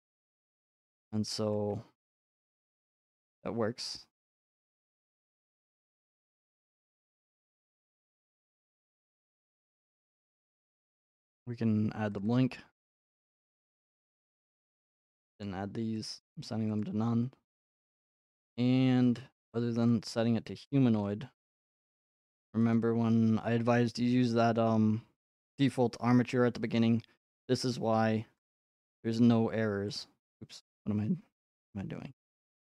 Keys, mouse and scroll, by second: 2.9 click, 5.2 click, 7.2 click, 9.8 click, 10.5 click, 11.2 click, 12.2 click, 12.3 click, 13.4 click, 13.9 click, 14.6 click, 15.4 click, 16.8 click, 17.0 middle click, 18.2-18.8 scroll, 19.9 click, 21.0 click, 21.8 click, 24.8 click, 27.4 click, 28.5 click, 30.0 click.